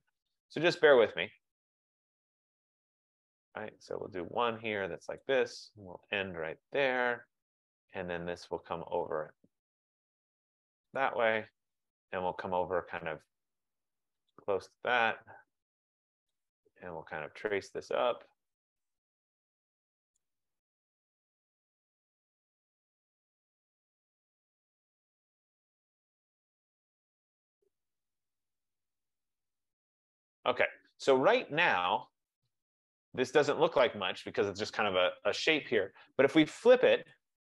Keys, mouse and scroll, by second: 1.0 click, 3.3 click, 5.3 click, 7.2 click, 11.1 click, 14.4 click, 16.4 click, 20.2 click, 22.7 click, 24.4 click, 26.3 F15, 28.9 click, 30.3 click, 32.5 click, 37.3 click.